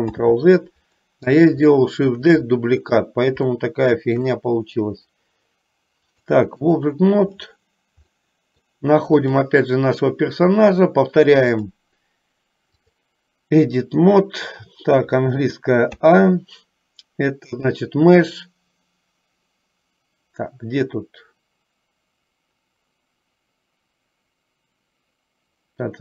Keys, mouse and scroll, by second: 0.2 ctrl+z, 1.9 shift+middle click, 3.7 shift+middle click, 6.3 click, 8.4 middle click, 11.5-13.3 drag, 17.8-26.0 drag.